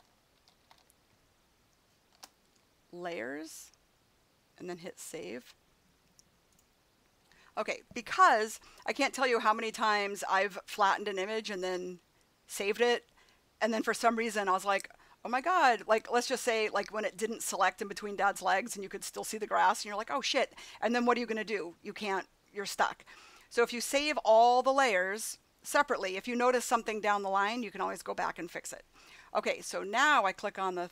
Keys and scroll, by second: 0.0-1.1 typing, 2.1 shift+s.